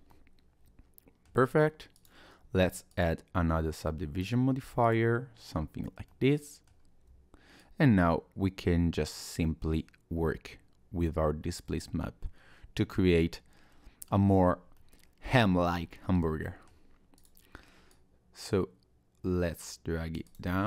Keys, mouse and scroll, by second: 0.1 middle click, 1.4-1.7 scroll down 1, 2.0 click, 4.8 click, 5.8-6.1 scroll up 1, 6.1 middle click, 7.6 shift+click, 11.8 middle click, 14.2-14.8 scroll down 3, 14.8 middle click, 16.0-16.3 scroll up 1, 16.4 middle click, 16.7-17.2 scroll down 1, 17.2 click, 17.9 click, 20.3 click, 20.5 middle click.